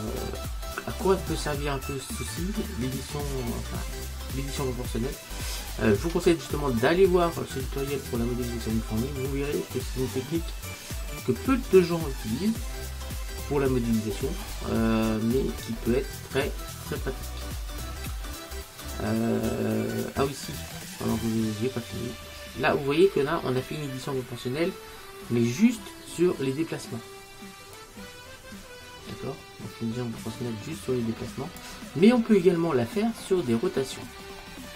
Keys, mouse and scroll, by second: 2.0-3.9 middle drag, 8.9-12.3 middle drag, 15.1-15.8 scroll down 1, 15.8-17.8 middle drag, 22.2 middle click, 22.3-22.8 scroll up 1, 23.2-25.5 middle drag, 27.8 click, 32.2-34.7 middle drag.